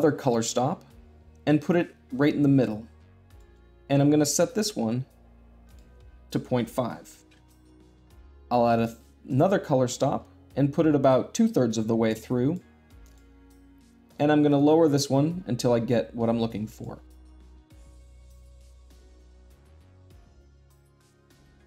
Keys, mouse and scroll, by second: 0.0-1.0 drag, 1.5-2.5 drag, 4.2-5.3 drag, 5.4-6.5 drag, 8.5-9.6 drag, 9.8-10.8 drag, 12.8-13.8 drag, 14.3-15.4 drag, 17.1 middle click, 17.5 click, 17.7 middle click, 17.9 click, 18.9 click, 19.2 click, 19.5 click, 19.7 middle click, 19.9 click, 20.2 click, 20.5 click, 20.9 click, 21.2 click, 21.4 click, 21.5 click, 21.6 shift+middle click.